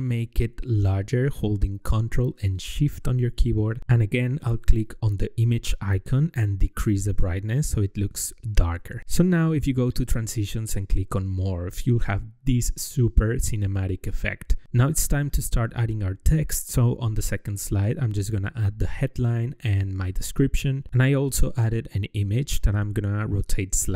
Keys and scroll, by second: 17.3 ctrl+v, 20.0 ctrl+v.